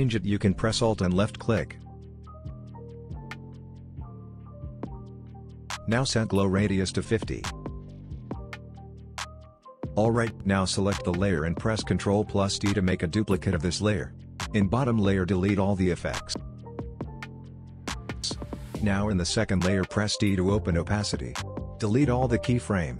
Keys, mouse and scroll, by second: 1.0 alt+click, 3.3 click, 5.2-6.8 scroll down 1, 6.8 click, 8.2 Return, 9.1 click, 11.6 ctrl+d, 13.6 click, 15.1-15.4 scroll up 1, 15.4 click, 19.6 t, 21.0-21.6 drag.